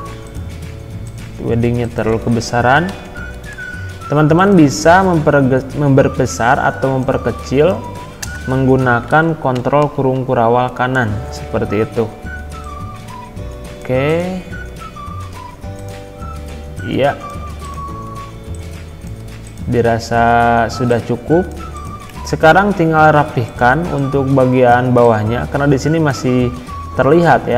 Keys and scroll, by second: 2.1 ctrl+a, 2.9 ctrl+[, 8.2 BackSpace, 9.1 ctrl+a, 9.5 ctrl+].